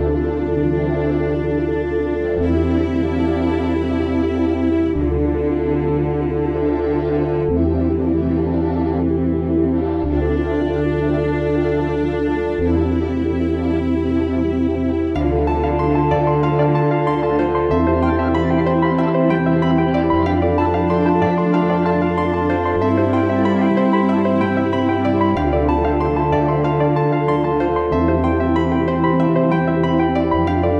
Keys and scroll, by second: 21.5 🖥, 30.2 super+=, 30.6 super+-.